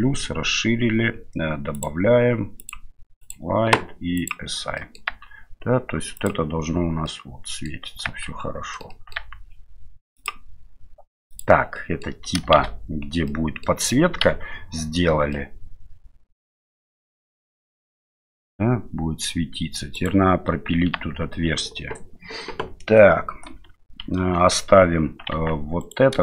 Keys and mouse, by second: 1.8 click, 2.7 click, 4.2 click, 4.8 middle click, 5.1 Tab, 6.2 click, 7.0 middle click, 8.1 Tab, 8.8 middle click, 8.9 middle click, 10.2 Tab, 10.2 click, 11.3 click, 11.7 middle drag, 12.6 shift+z, 13.3-13.7 middle drag, 14.3 KP_Divide, 15.3-19.2 middle drag, 19.9 right click, 20.9 Tab, 23.7 KP_Divide, 24.2 KP_Divide, 25.3 Tab, 25.8 right click.